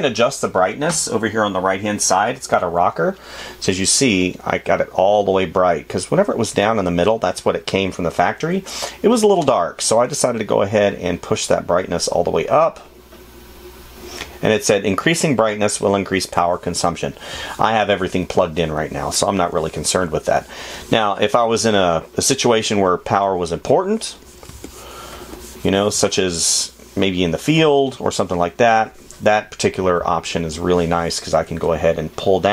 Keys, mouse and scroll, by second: 25.1 space, 31.4 space.